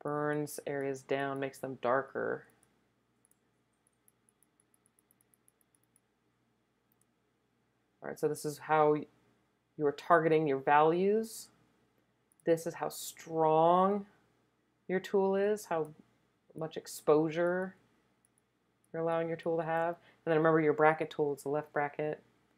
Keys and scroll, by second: 21.6 [, 21.8 [, 22.0 [, 22.4 [.